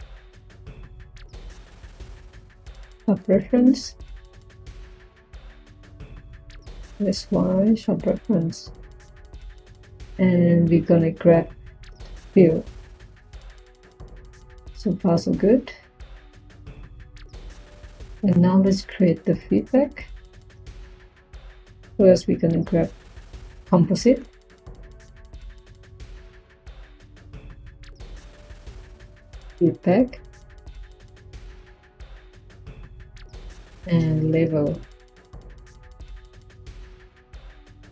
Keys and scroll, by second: 20.4 Tab, 21.6 c, 27.8 Tab, 28.6-29.8 typing, 33.6 Tab, 33.9-34.8 typing.